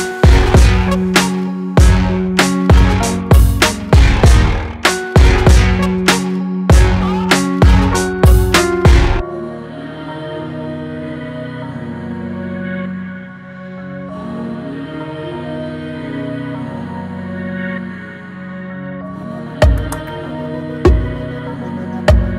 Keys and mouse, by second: 0.4-3.8 drag, 6.7-8.4 drag, 9.5-11.0 drag.